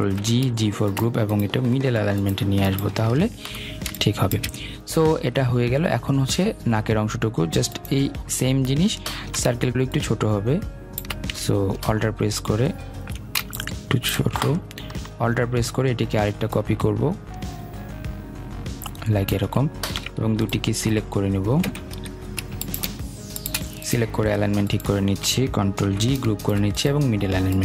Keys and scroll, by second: 0.1 ctrl+g, 21.7 Escape, 25.8 ctrl+g.